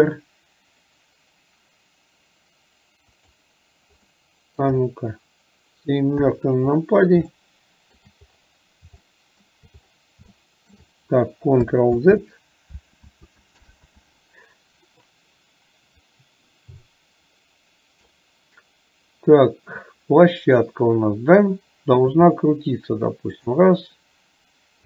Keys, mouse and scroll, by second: 4.2 middle click, 7.4 shift+middle click, 9.1 shift+middle click, 10.3 shift+middle click, 16.0-18.2 drag.